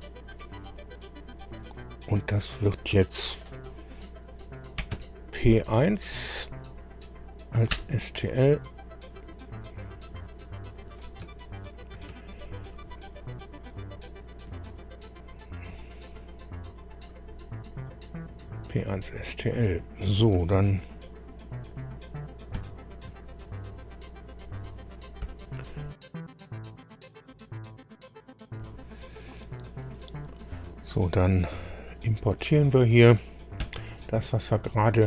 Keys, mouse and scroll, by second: 4.6-5.4 typing, 7.8 Return, 9.8 click, 12.0 ctrl+e, 13.6 click, 17.8 click, 22.6 ctrl+alt+b, 25.2 7, 25.9 7, 33.6 ctrl+o.